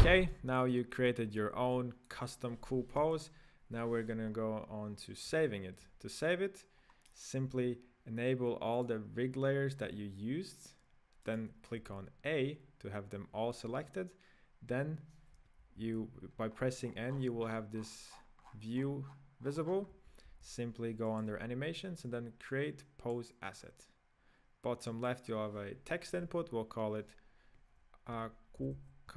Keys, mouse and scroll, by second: 0.6-1.3 scroll down 1, 1.3-1.7 scroll down 2, 1.7-3.0 middle drag, 3.0 KP_1, 4.3-5.0 scroll up 4, 5.0-5.5 scroll down 1, 5.5-6.7 shift+middle drag, 6.7 scroll down 2, 7.1 right click, 8.8 click, 9.8-10.1 scroll up 3, 11.3 right click, 12.0 a, 15.3 n, 15.8 n, 16.5-17.1 scroll down 8, 17.1-18.1 scroll up 22, 18.1-19.6 scroll down 33, 19.6 scroll up 6, 19.9 n, 20.3 n, 21.1 click, 22.5-28.2 drag.